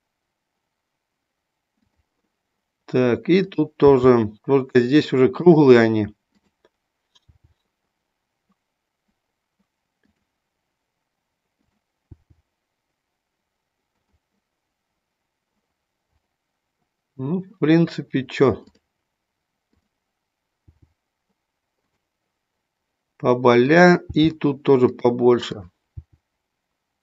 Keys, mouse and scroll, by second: 1.8 click, 3.4 click, 3.9 g, 6.2 click, 7.2 g, 12.1 g, 14.0 click, 18.6 click, 20.6 g, 23.6 click, 24.0 g, 24.9 click, 25.5 click, 25.9 g.